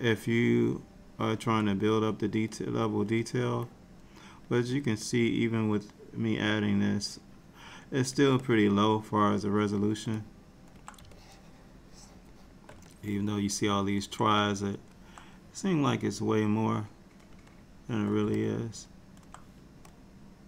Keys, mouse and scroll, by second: 0.8 shift+click, 2.7 click, 3.8 click, 5.2 click, 8.5 middle click, 10.3 middle click, 11.2 shift+click, 12.4 shift+click, 13.0 middle click, 16.4 click, 17.6 shift+click, 18.5 middle click, 20.0 click.